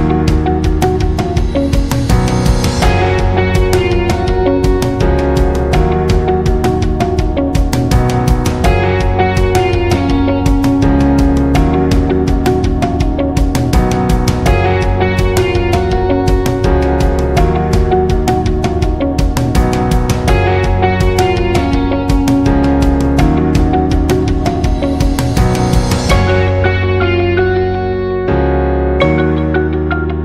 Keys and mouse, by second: 0.4 e, 2.0 right click, 3.2 m, 3.9 shift+middle click, 5.0 right click, 5.7 middle click, 6.6 m, 7.4 middle click, 8.3 right click, 8.8 middle click, 9.3 e, 11.6 middle click, 12.3-14.3 middle drag, 14.8-17.4 middle drag, 18.5 middle click, 19.2 middle click, 19.7 g, 21.0 middle click, 22.2 shift+right click, 23.1 m, 24.4 right click, 25.7 middle click, 26.6 e, 28.2 right click, 28.8 shift+right click, 30.1 m.